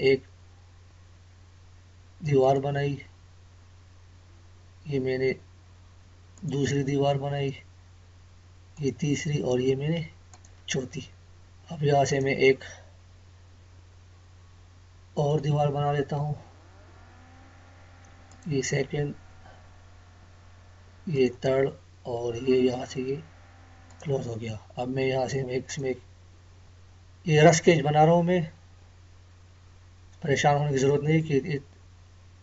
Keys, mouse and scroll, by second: 2.4 click, 6.3 click, 8.7 click, 13.7-14.1 scroll up 1, 15.5-16.7 scroll down 1, 18.3 click, 21.1 click, 23.8 click, 23.9 click, 30.8 click.